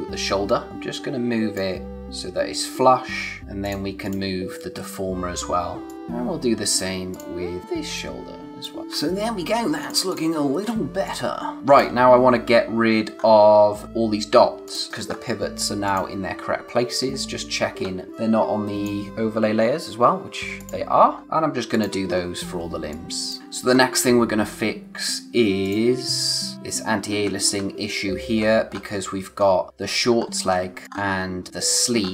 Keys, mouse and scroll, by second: 3.6 click, 5.9 click, 7.6 scroll up 1, 10.8 space, 11.0 click, 11.3 space, 13.1-14.6 scroll up 1, 14.6 click, 14.9 space, 15.1-15.8 scroll up 1, 15.8 click, 17.1-17.8 scroll down 1, 17.8-18.1 scroll up 1, 18.1 click, 19.1-20.5 scroll down 1, 20.5 click, 21.0 scroll down 1, 21.2 space, 21.7 click, 22.1-22.6 scroll up 1, 22.6 space, 22.9 click, 23.2 space, 23.6 scroll up 1, 25.6 click, 27.1-28.0 scroll down 1, 28.0 scroll up 1, 30.6 space, 30.8 click.